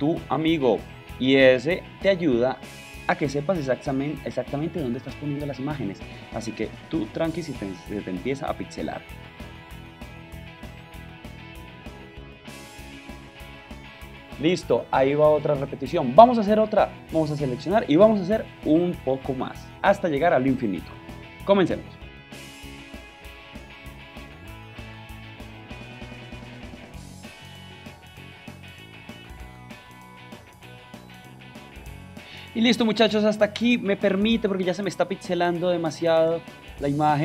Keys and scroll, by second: 6.0 shift+space, 10.7 shift+Left, 22.1 super+j, 22.2 alt+super+t, 22.4 alt+shift+space, 23.3 shift+space, 24.7 shift+Up, 25.1 shift+Left, 25.4 shift+Left, 25.8 super+j, 26.0 alt+super+space, 26.8 shift+space, 28.1 shift+Left, 28.3 super+j, 28.4 super+t, 28.5 alt+shift+space, 30.3 super+j, 30.5 alt+shift+space, 31.3 alt+shift+super+t, 35.2 super+h, 36.2 super+j.